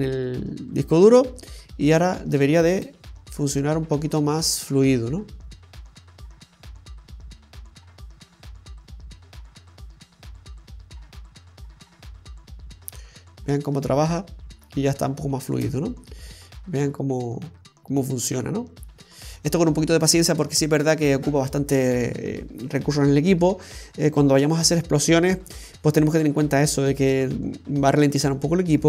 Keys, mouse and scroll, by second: 3.1 click, 4.3 scroll up 1, 15.7 space, 16.8 middle click, 21.1-22.0 scroll up 1.